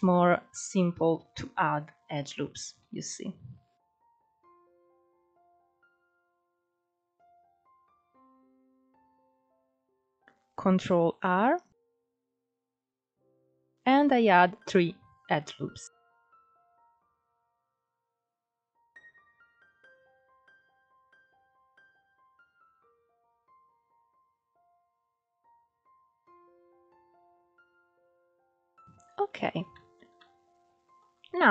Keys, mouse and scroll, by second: 3.6-5.0 drag, 5.0 middle click, 8.5-10.9 middle drag, 10.9 click, 11.6 ctrl+r, 16.3-17.8 scroll up 2, 17.8 click, 19.7 click, 20.6 click, 22.2 scroll down 2, 22.5 Tab, 22.7 click, 22.8 scroll down 1, 23.1 alt+z, 23.2 scroll up 4, 23.4 right click, 23.8 click, 24.0 right click, 24.3 click, 24.5 scroll down 5, 24.6 shift+middle click, 24.8 scroll up 7, 25.0 click, 25.5 alt+z, 25.9 s, 26.4-26.8 scroll down 7, 26.5 alt+z, 26.6 click, 26.8 shift+middle click, 26.9 scroll up 2, 27.1 scroll down 1, 27.3 click, 27.5 s, 28.0 s, 28.4 middle click, 28.7 scroll up 4, 28.9-31.0 shift+middle drag, 31.0-31.5 drag.